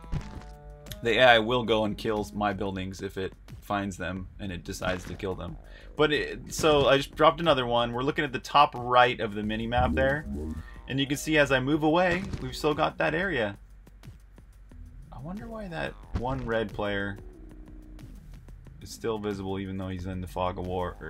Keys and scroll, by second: 0.0-3.5 typing, 5.4-10.9 typing, 12.5 typing, 19.4-21.0 typing.